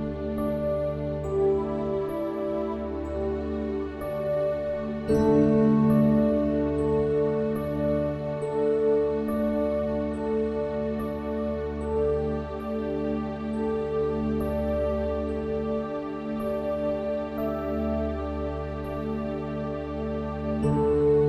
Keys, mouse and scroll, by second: 1.7 click, 2.0 x, 2.8 middle click, 3.8 click, 4.4 click, 5.0 i, 6.6 click, 7.2 s, 8.0 click, 8.8 s, 10.6 s, 11.4 click, 12.1 middle click, 12.7 s, 13.6 Tab, 14.0 Tab, 15.9 click, 16.8 Tab, 17.1 Tab, 17.5 ctrl+KP_Add, 18.2 click, 18.6 Tab, 18.8 Tab, 19.5 click, 20.1 ctrl+e, 20.8 Tab, 21.0 Tab.